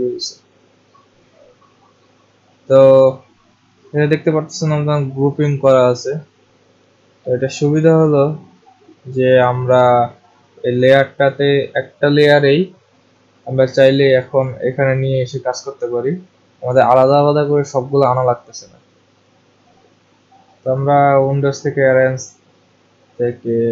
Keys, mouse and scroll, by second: 7.5 click, 14.2 click, 15.3 click, 20.8 click.